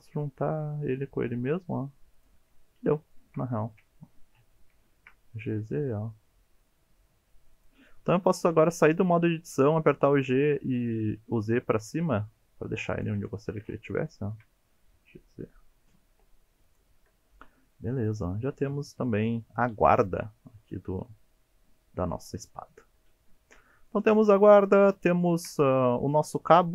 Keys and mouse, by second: 2.1 click, 3.1 shift+middle click, 3.8 KP_1, 4.8 shift+middle click, 5.3 g, 5.5 z, 7.5 click, 8.9 Tab, 10.0 g, 10.2 z, 12.9 click, 13.4 shift+middle click, 14.1 shift+middle click, 14.8 g, 14.9 z, 16.7 click, 17.0 Tab, 17.4 middle click, 18.3-23.1 middle drag, 23.4 Tab, 23.9-24.9 middle drag, 25.2 shift+middle click, 26.5-26.7 middle drag.